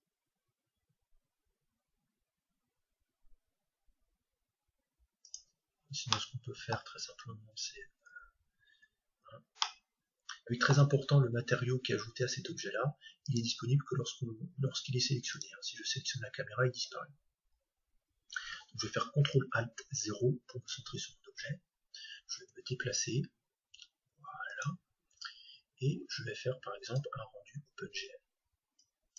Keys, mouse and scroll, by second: 5.3-7.2 drag, 5.8-7.7 middle drag, 7.7 scroll up 1, 8.0-9.1 scroll down 1, 9.1-9.6 scroll down 1, 9.6-11.5 middle drag, 13.2-17.5 right drag, 17.5-20.0 middle drag, 17.5-17.9 scroll up 1, 22.4 ctrl+alt+g, 24.6-26.5 drag, 26.8-28.7 drag.